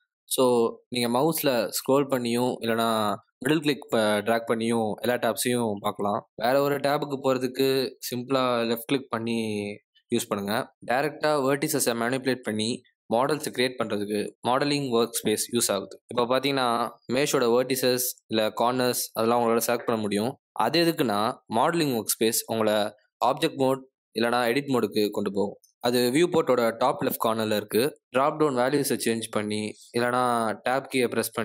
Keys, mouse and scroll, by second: 0.6 middle click, 26.4 click, 27.1 click, 30.7 Tab.